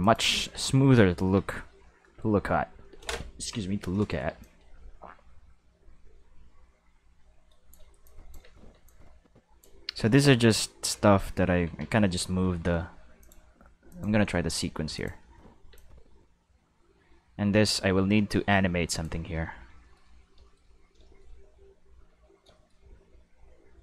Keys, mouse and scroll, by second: 0.0 click, 0.5 space, 1.3 space, 2.8 middle click, 3.9-4.4 middle drag, 4.4-7.7 drag, 8.0 click, 8.4 space, 8.7 space, 8.8 click, 10.0 Tab, 10.4 a, 10.9 q, 11.6 Tab, 12.0 a, 13.2 click, 13.9 click, 14.9 click, 15.2 space, 15.7 space, 15.7-19.0 drag, 20.8 middle drag, 21.2 middle click, 23.1 middle click.